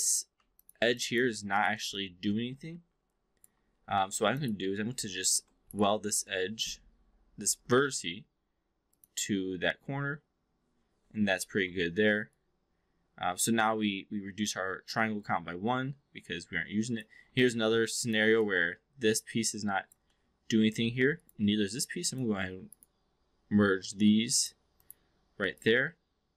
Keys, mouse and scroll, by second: 0.3 2, 0.6 click, 1.0 alt+drag, 2.0-3.4 alt+drag, 4.0 1, 4.3 click, 5.1 shift+click, 5.6-9.0 right drag, 11.8 alt+middle drag, 12.2-17.0 alt+drag, 18.4-20.0 alt+drag, 20.1 alt+middle drag, 21.0 shift+click, 21.9 shift+click, 22.6-24.4 right drag, 24.7 click, 25.6-26.3 alt+drag.